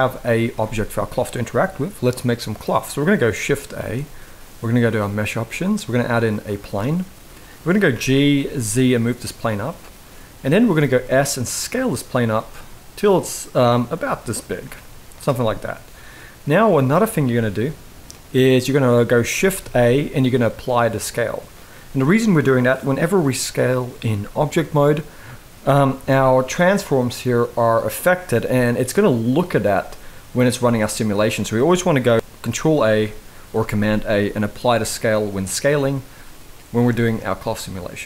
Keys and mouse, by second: 3.5 shift+a, 7.6 g, 9.6-10.3 middle drag, 10.5 s, 12.4-13.7 middle drag, 14.3 s, 15.0-16.4 middle drag, 17.0-17.3 middle drag, 19.3 ctrl+a, 23.8 s, 25.8 n, 28.2 s, 30.3 ctrl+z, 30.8 middle click, 32.4 ctrl+a, 36.5 n, 36.9-38.0 middle drag.